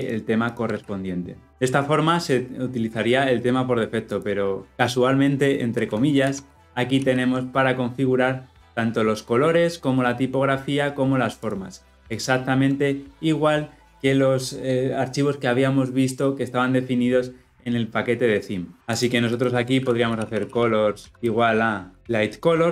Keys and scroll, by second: 0.6 ctrl+x, 0.8 ctrl+v, 6.9 ctrl+p, 12.2 ctrl+b.